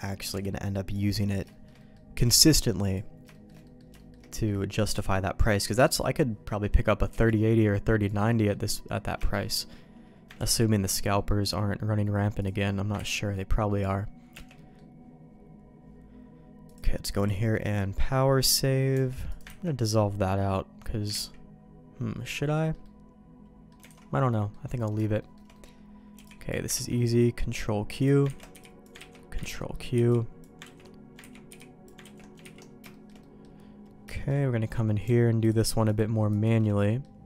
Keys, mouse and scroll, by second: 0.2 b, 1.1 middle click, 1.4 middle click, 1.7 middle click, 2.1 b, 3.3 shift+middle click, 3.6 middle click, 3.9 shift+middle click, 4.2 middle click, 4.9 b, 5.7 middle click, 6.4 middle click, 7.0 b, 8.2 middle click, 9.2 shift+middle click, 9.6 middle click, 10.3 ctrl+q, 11.1 middle click, 12.3 click, 12.9 ctrl+x, 13.3 middle click, 14.3 Tab, 14.5 middle click, 16.8 click, 17.5 middle click, 18.9 Tab, 19.2 click, 19.6 ctrl+x, 20.2 middle click, 21.8 ctrl+z, 22.5 middle click, 22.8 middle click, 23.8 alt+a, 24.2 middle click, 24.6 middle click, 25.1 shift+middle click, 25.5 middle click, 26.1 b, 26.7 ctrl+q, 27.9 click, 28.3 ctrl+x, 28.5 b, 28.9 ctrl+q, 29.3 ctrl+x, 29.5 middle click, 29.9 b, 30.7 ctrl+q, 31.2 ctrl+x, 31.4 b, 32.0 ctrl+q, 32.4 ctrl+x, 32.9 shift+middle click, 33.1 middle click, 34.1 shift+middle click, 36.2 alt+shift+click, 36.8 middle click.